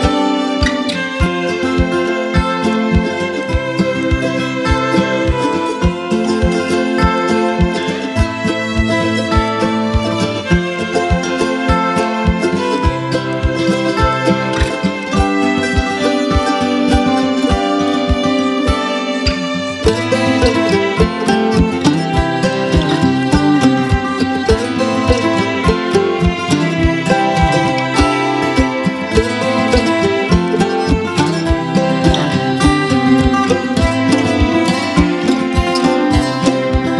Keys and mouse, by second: 2.2 space, 2.4-3.0 click, 2.7 space, 3.1-4.3 click, 3.6 space, 3.7 click, 4.3 space, 4.5-5.1 drag, 5.8-9.0 typing, 6.0 click, 6.8 click, 7.5-8.4 click, 8.4-9.1 click, 9.2-11.0 drag, 10.9 space, 11.1 click, 11.4-12.3 space, 11.7-13.6 drag, 13.6-17.2 typing, 13.8-14.4 click, 14.7-15.3 click, 15.4 click, 16.1-16.7 click, 16.8-17.4 click, 17.5-20.0 drag, 19.2 space, 19.3 click, 19.7 space, 20.1-21.4 drag, 24.3 [, 24.7-26.6 drag, 30.0 space, 30.2-30.8 click, 30.5 space, 30.9-32.7 drag, 33.0 [, 33.6-34.8 click, 34.6 [, 34.8 [, 35.0 [, 35.2-36.1 drag.